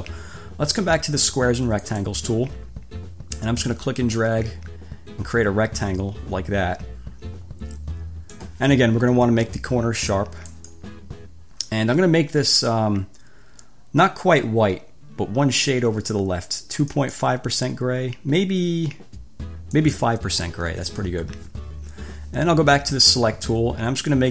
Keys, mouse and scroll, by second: 2.0 click, 3.8-8.8 drag, 10.8 click, 17.2 click, 19.9 click, 23.2 click.